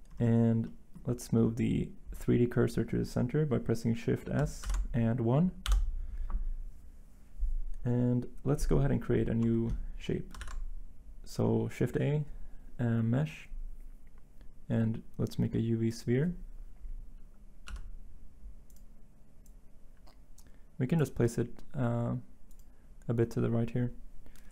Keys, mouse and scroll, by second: 4.6 s, 5.6 1, 17.7 s.